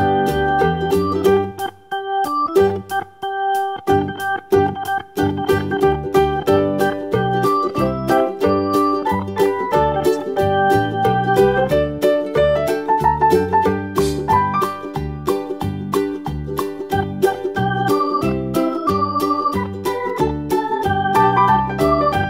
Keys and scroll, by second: 5.0 BackSpace, 13.0 super+d, 15.1 super+d, 19.4 super+d.